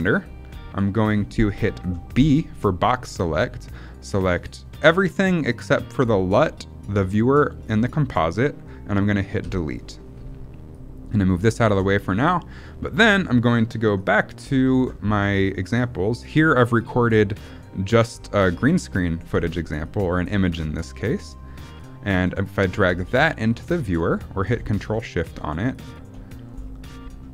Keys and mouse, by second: 0.7 middle click, 1.4 middle click, 2.0 b, 9.3 Delete, 10.6-11.6 drag, 12.0 middle click, 19.7 click, 20.4 middle click, 20.9 middle click, 21.7 click, 22.8 click, 24.9 middle click.